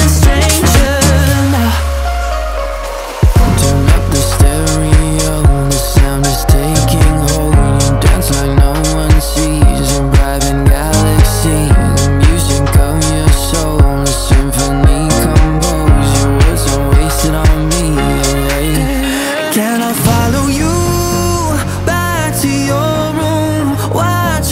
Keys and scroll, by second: 7.2 BackSpace, 8.1 -, 8.6 8, 9.0 0, 9.9 Return.